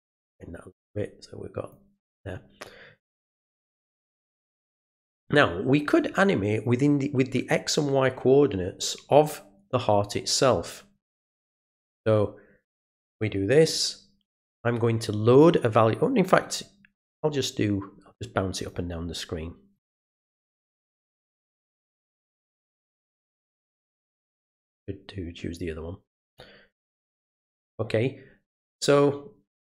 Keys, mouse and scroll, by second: 4.0 click, 12.8 click, 18.6 click, 19.7 click, 22.8 click, 23.5 click, 26.3 click, 27.2 click.